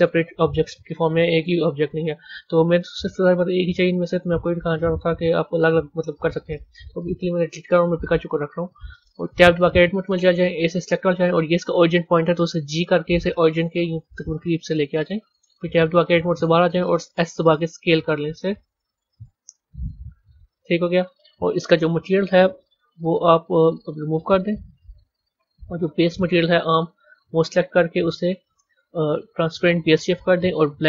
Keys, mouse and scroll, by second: 0.2 click, 2.6 click, 3.2 click, 7.7 Delete, 8.3 click, 9.4 b, 15.4 Tab, 17.4 s, 19.4 scroll down 6, 20.2-21.8 scroll down 5, 21.8 click, 24.1 click, 24.9 click, 25.7-30.8 drag.